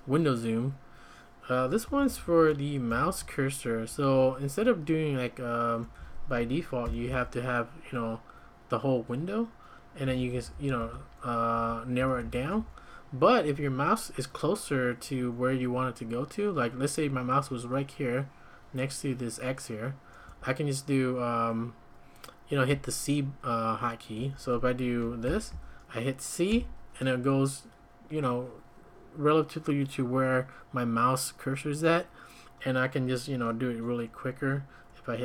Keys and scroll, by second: 1.8 j, 2.0 j, 2.2 j, 2.9 shift+v, 3.9 Escape, 4.3 Escape, 5.8 `, 7.0 ctrl+;, 7.0 typing, 9.8-13.1 typing, 13.5 Escape, 20.2 `, 24.2 `, 25.2 ctrl+;, 26.5 c.